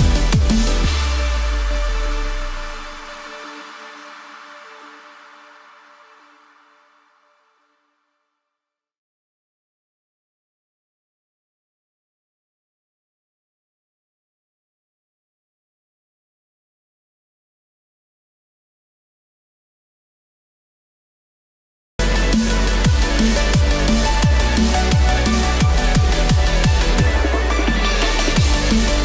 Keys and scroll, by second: 14.9 Return, 18.2 ctrl+=, 24.3 ctrl+z.